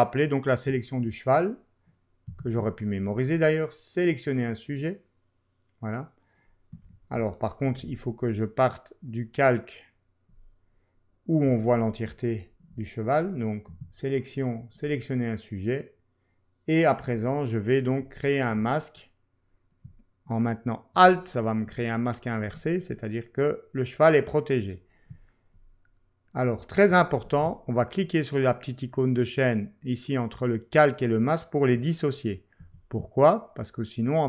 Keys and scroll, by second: 2.3 w, 7.6 super+d, 13.7 w, 27.2 ctrl+q.